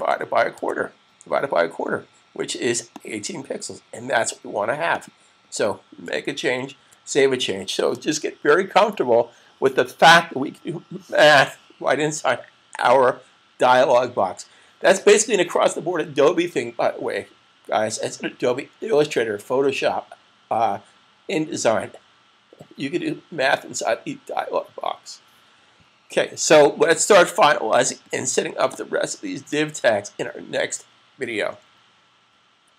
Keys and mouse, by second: 3.0 click, 3.0 typing, 6.6 super+s, 28.6 click, 29.6 super+s.